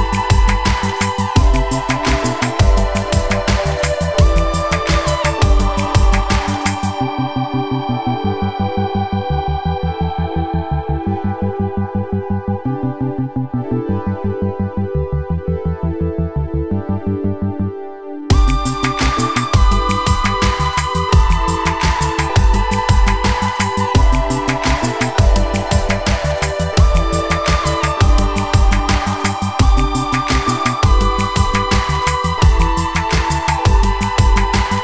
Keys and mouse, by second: 7.3 ctrl+z, 8.1 shift+click, 9.1 Tab, 10.7 shift+d, 16.0 s, 17.6 click, 17.8 middle click, 18.7-22.3 middle drag, 22.6 shift+middle drag, 23.3-24.2 middle drag, 24.5-25.0 middle drag, 25.4-27.0 middle drag, 27.3-27.6 shift+middle drag, 31.8-32.4 drag, 33.0 x, 34.1-34.4 shift+middle drag.